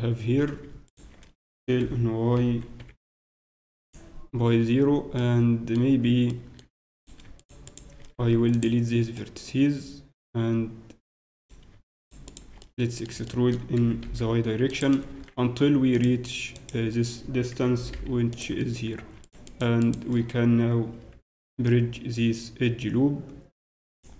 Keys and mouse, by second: 0.8-2.7 right drag, 1.4 s, 3.8 s, 6.3 middle click, 7.0-9.1 right drag, 8.1 x, 9.1 middle click, 10.2 click, 10.2 middle click, 11.3-13.4 right drag, 12.6 middle click, 12.7-14.0 drag, 13.9 e, 14.0-15.0 middle drag, 15.9-17.7 drag, 17.7 shift+g, 19.2-21.7 drag, 21.5 w.